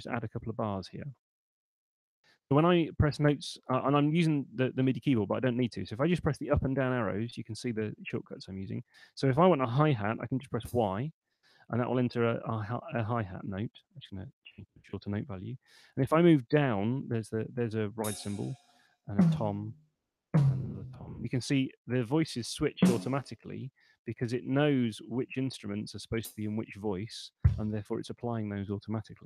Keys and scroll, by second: 0.0-0.6 typing, 5.1 Up, 6.1 Down, 7.1 Up, 10.5 y, 14.0 5, 15.9 Down, 17.9 y, 18.5 Down, 19.1 y, 19.7 Down, 20.1 y, 20.9 Down, 22.7 y, 24.1 Down, 25.3 Up, 25.7 Down, 26.1 y, 26.7 Up, 27.3 y.